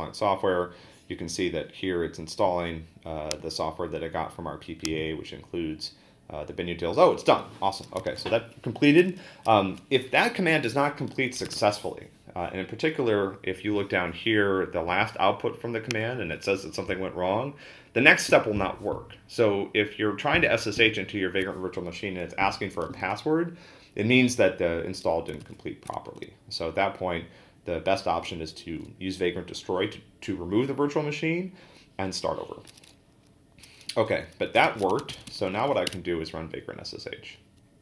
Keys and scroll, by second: 8.1 ctrl+l, 11.5 ctrl+a, 11.5 [, 25.4 ctrl+c, 34.3-36.1 typing.